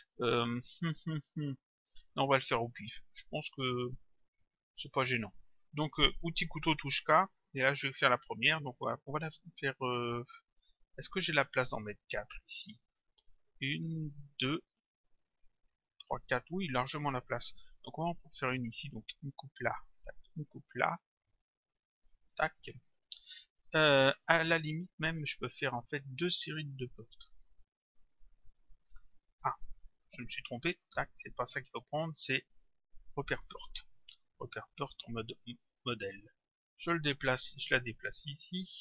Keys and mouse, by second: 4.8 click, 6.9 k, 11.3 click, 12.5 click, 19.9 click, 22.2 click, 25.9 click, 27.1 click, 28.5 click, 33.3 click, 34.8 click, 36.1 click.